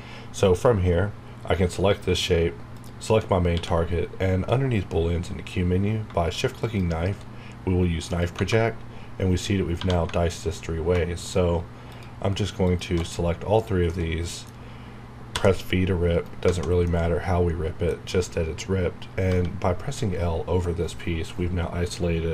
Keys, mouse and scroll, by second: 2.0 shift+Num_Lock, 2.0 click, 2.7 shift+click, 3.5 q, 6.0 q, 6.6 shift+click, 8.3 Tab, 9.1 scroll up 1, 9.7 1, 10.3 alt+click, 13.1 shift+middle click, 13.6 scroll down 1, 13.9-15.3 middle drag, 15.3 v, 16.1 right click, 16.5 alt+a, 16.9-19.2 middle drag, 19.2 l.